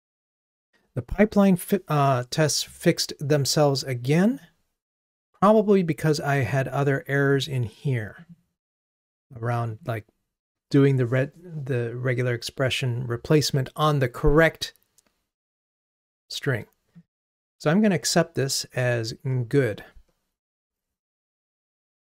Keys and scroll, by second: 21.7 super+k.